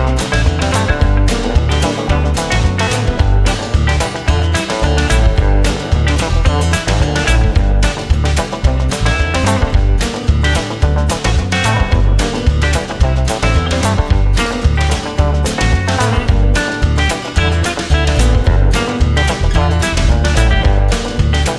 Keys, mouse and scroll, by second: 1.7 space, 2.7 right click, 3.4 right click, 5.6 right click, 8.1 right click, 8.6 right click, 9.9 right click, 12.2 right click, 13.9 right click, 18.5 right click, 20.9 space.